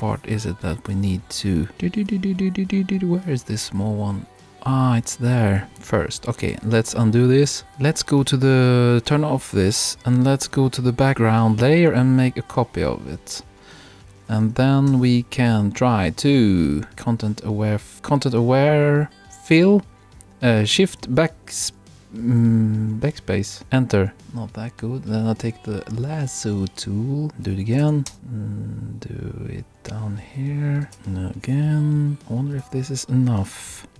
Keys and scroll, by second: 17.9 shift+BackSpace, 23.6 Return, 28.0 shift+BackSpace, 28.1 shift+Return.